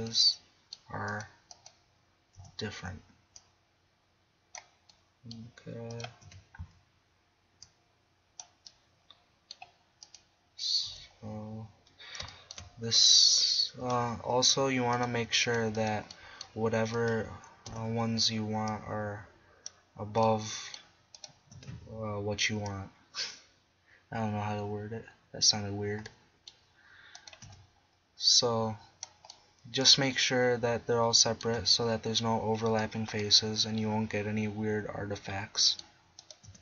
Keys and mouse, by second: 2.4 KP_1, 5.9 right click, 6.0 click, 6.2 KP_1, 10.9 KP_1, 11.9 middle click, 13.9 click, 17.7 KP_1, 21.6 KP_1, 24.5 middle click, 26.1-27.2 middle drag, 27.2 click, 27.5 KP_1, 28.5 click, 29.5 middle click, 29.7 middle click, 29.9 middle click, 30.1 middle click, 31.3-33.2 middle drag, 31.6 KP_1, 35.2-36.2 middle drag, 36.5 KP_1.